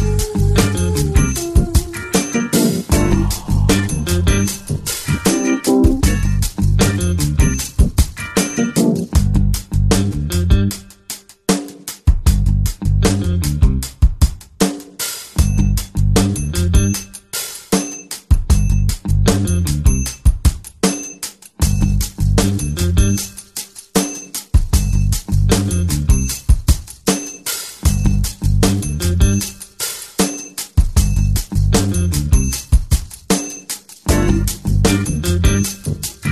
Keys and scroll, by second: 19.3 ctrl+i, 33.5 ctrl+alt+super+space.